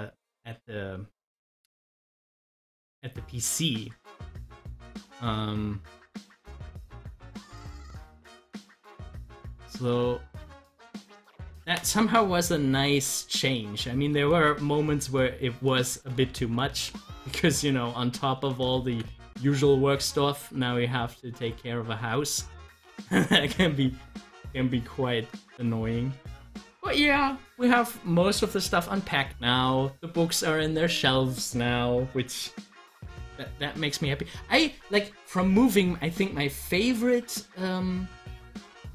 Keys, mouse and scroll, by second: 13.3 click, 14.4 ctrl+z, 32.8 click, 33.0 double click.